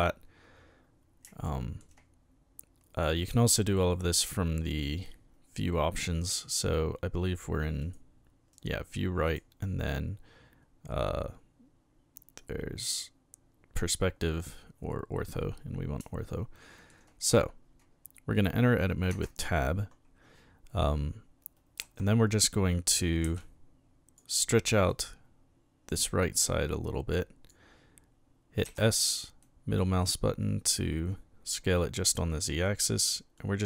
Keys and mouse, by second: 1.4-1.8 shift+middle drag, 3.2 click, 7.8 click, 9.3 click, 16.3-16.9 shift+middle drag, 19.1 Tab, 21.8 a, 23.3 b, 23.4 click, 24.9-27.5 drag, 28.7 s, 29.4 middle click, 32.6 click, 33.4-33.6 drag.